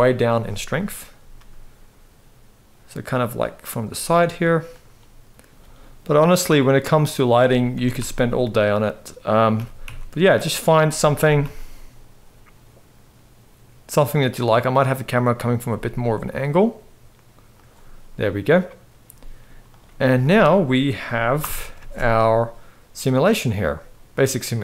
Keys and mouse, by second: 1.0 g, 3.4 click, 3.6 g, 5.5 ctrl+s, 6.2-7.0 drag, 7.4 r, 9.3 g, 10.9 r, 15.4 g, 18.8 z, 20.0 ctrl+s, 21.1 shift+Left, 21.5 space.